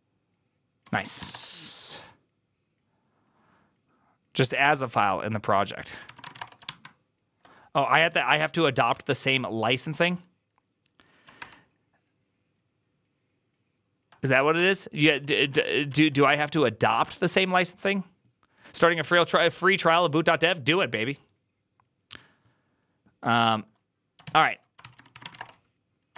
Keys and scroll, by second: 0.8 ctrl+c, 0.8-1.6 typing, 5.9-6.7 typing, 7.9 alt+{, 11.3 ctrl+d, 14.4 ctrl+d, 15.0 ctrl+c, 15.1-16.7 typing, 24.7 alt+{, 24.7 ctrl+c, 24.8-26.1 typing.